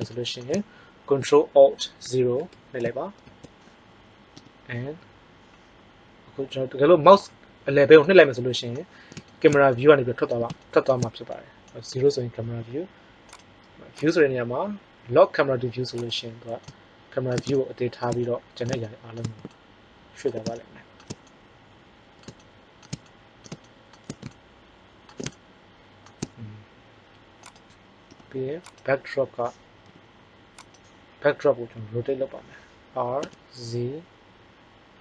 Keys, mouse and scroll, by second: 2.3 ctrl+alt+KP_0, 4.3 n, 11.9 KP_0, 28.0 n, 29.8 g, 32.0 r.